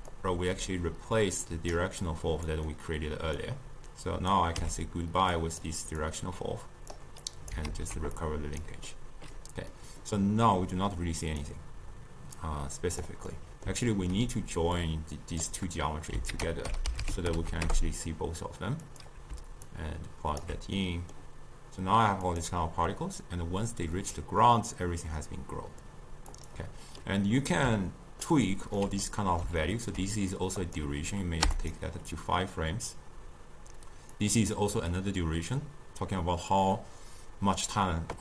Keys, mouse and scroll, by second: 0.2-2.2 drag, 2.7-3.5 middle drag, 3.5 click, 4.7 x, 5.4-7.8 drag, 7.8 ctrl+x, 8.2 click, 8.9-11.3 middle drag, 11.3-13.4 drag, 13.4-14.8 middle drag, 14.8 click, 16.4 ctrl+a, 19.7-20.9 alt+right drag, 20.9-22.3 middle drag, 22.3-25.4 drag, 26.4-27.1 drag, 27.1-30.7 middle drag, 30.7-31.8 drag, 34.2 click.